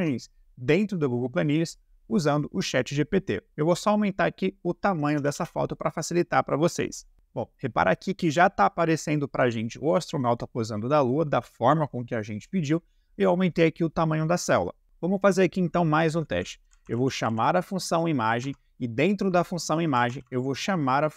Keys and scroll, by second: 5.2 BackSpace, 14.8 BackSpace, 16.3-17.1 typing, 18.3 e, 18.4 Tab, 19.8 shift+g, 20.0 shift+p, 20.1 shift+t.